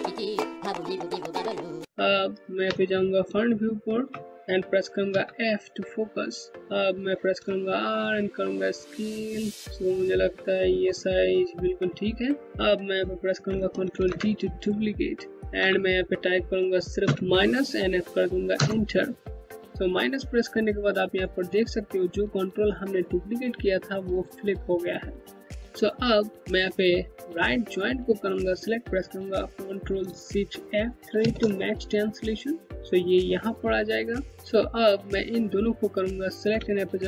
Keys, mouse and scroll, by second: 2.2 space, 2.4 click, 2.8 space, 4.2-4.7 scroll up 1, 4.7 f, 5.3 scroll down 1, 6.5 r, 7.5 middle click, 10.5 scroll down 1, 13.1 ctrl+Num_Lock, 13.5 ctrl+d, 15.3 Left, 16.6 KP_Subtract, 18.1 KP_Enter, 27.0 KP_Enter, 27.6 ctrl+click, 30.8 ctrl+shift+F3, 33.3 click, 36.2 space, 36.3 click, 36.7 space.